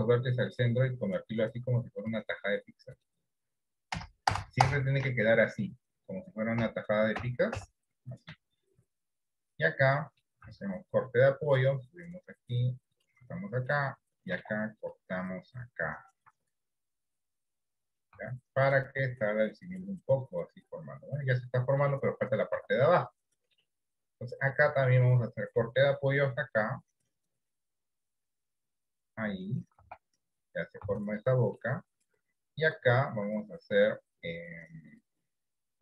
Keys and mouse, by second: 4.1 ctrl+KP_Add, 9.4 ctrl+KP_Subtract, 10.1 middle click, 10.8 ctrl+r, 13.6 middle click, 14.4 ctrl+r, 18.5 Tab, 18.9-22.4 middle drag, 22.7 Tab, 23.1-24.2 middle drag, 24.7 middle click, 25.2 shift+middle click, 26.0 ctrl+r, 30.1 Tab, 30.9 Tab, 31.4 middle click, 32.8 ctrl+r.